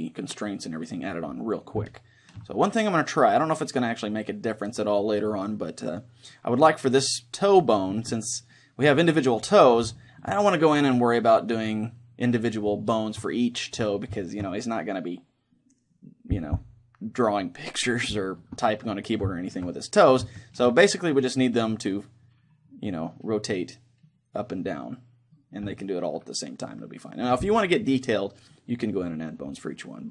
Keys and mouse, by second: 2.6-4.5 middle drag, 6.1-7.9 middle drag, 9.9-17.5 middle drag, 18.2-24.3 middle drag, 24.7-28.6 middle drag.